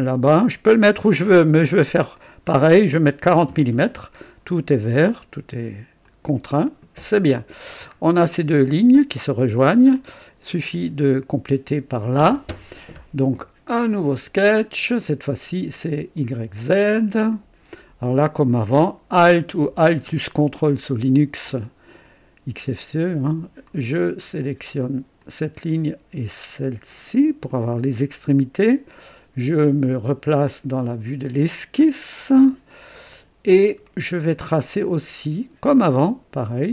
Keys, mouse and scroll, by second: 0.0 click, 2.1 click, 3.3 KP_4, 3.5 KP_0, 3.7 Return, 6.0 click, 7.6-8.0 scroll down 1, 8.2-9.5 drag, 9.9 click, 14.1 click, 16.1 click, 17.3 click, 20.5 ctrl+alt+click, 23.6 click, 25.1 click, 26.8 click, 31.2 click, 32.1-32.5 scroll up 1, 32.7 right click, 33.5 scroll up 1, 33.8 right click, 35.6 click.